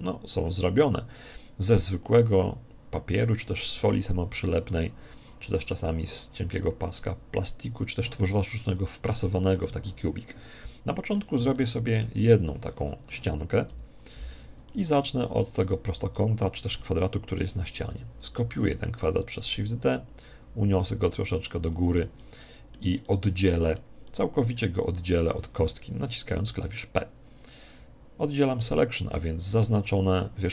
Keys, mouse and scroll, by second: 9.5-11.2 middle drag, 11.5-13.2 middle drag, 13.6 KP_1, 14.6-17.2 middle drag, 18.5 shift+d, 21.7 click, 22.1-25.7 middle drag.